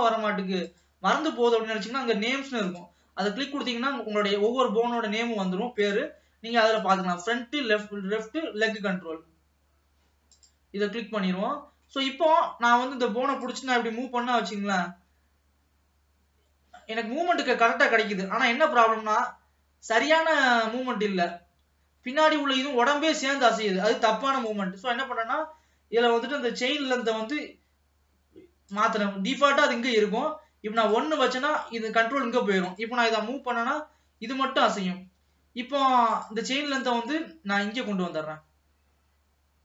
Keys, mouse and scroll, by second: 0.7 click, 1.7-2.7 scroll down 2, 2.7 click, 3.6-4.6 middle drag, 4.6-5.0 scroll up 1, 5.9 click, 6.8-10.0 drag, 11.3-11.6 scroll down 2, 11.6 middle click, 12.2-12.7 scroll up 1, 12.7 middle click, 13.4 click, 14.2 g, 24.4 click, 26.9-33.1 drag, 33.5 g, 36.2 click, 36.7 click.